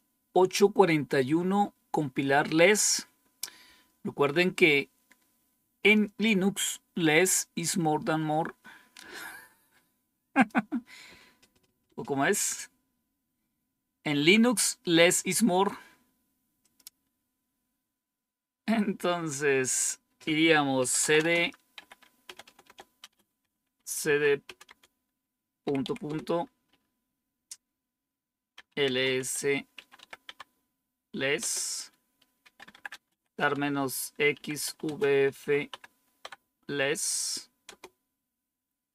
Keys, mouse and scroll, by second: 10.2 click, 16.5 click, 20.4-25.7 typing, 25.9 Return, 28.2-30.4 typing, 31.3 Return, 32.1-36.1 typing, 37.6 Return, 38.6-38.9 typing.